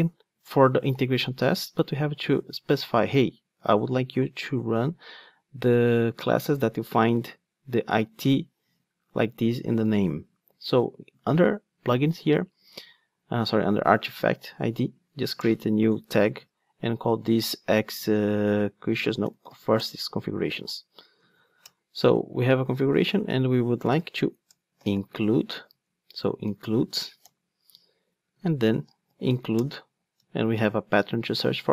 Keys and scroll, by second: 19.9 Return, 21.0 super+z, 25.7 Return.